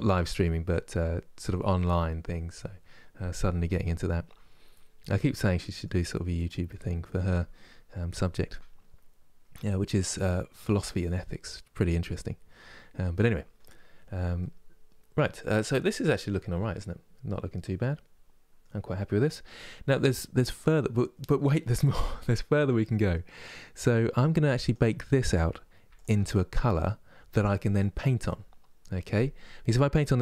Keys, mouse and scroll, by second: 14.1-18.5 middle drag, 18.5-22.2 scroll up 2, 24.4 click.